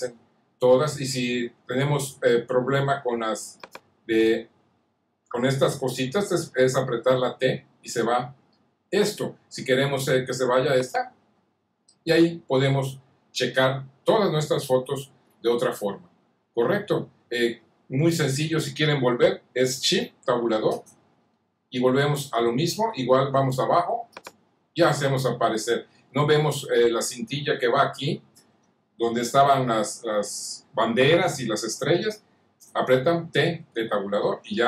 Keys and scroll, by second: 7.3 t, 20.6 Tab, 33.4 t.